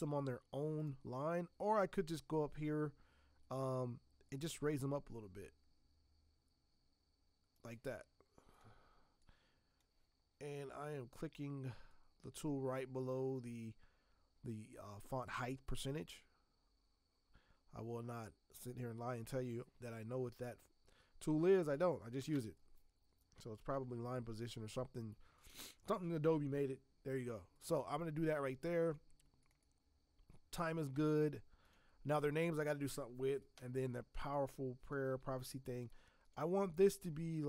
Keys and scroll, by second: 22.3 ctrl+Return, 23.7 v.